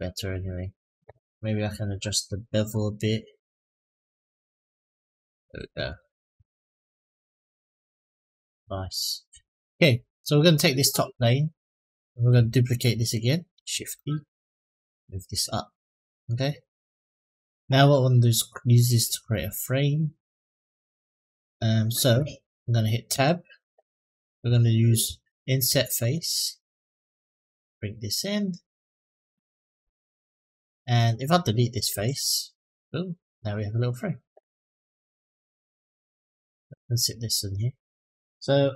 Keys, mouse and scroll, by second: 0.1 click, 1.6 click, 2.5-5.3 drag, 5.6 click, 6.2-6.8 middle drag, 7.4-8.3 scroll down 4, 8.3-9.2 middle drag, 10.1 click, 13.5 shift+d, 14.5 click, 15.5-16.0 middle drag, 16.4-17.1 scroll up 2, 17.1 middle drag, 22.9 Tab, 25.3 click, 26.8 click, 29.8 click, 31.6 Delete, 34.5 click, 35.3 Tab, 35.9-36.3 middle drag, 36.9 click, 37.5 click.